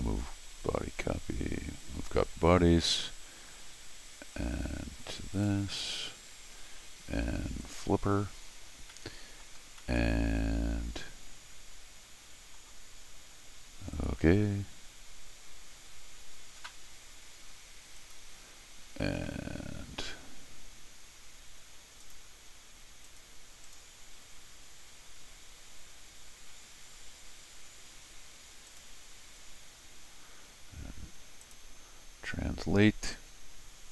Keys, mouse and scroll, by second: 1.8 click, 5.3 click, 7.6 click, 9.6 scroll down 1, 9.8-12.5 middle drag, 13.9 click, 18.0 click, 22.0 click, 23.1 click, 23.6 click, 28.7 click, 31.4 click, 33.1-33.9 drag.